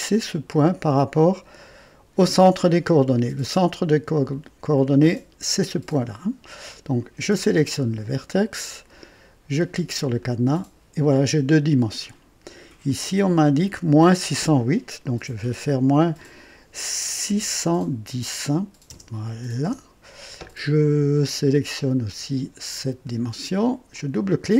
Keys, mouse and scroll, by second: 10.2 click, 12.8 click, 15.2 -, 17.2 KP_6, 17.6 KP_1, 18.9 KP_0, 19.6 Return, 21.6-23.2 drag, 23.9 click.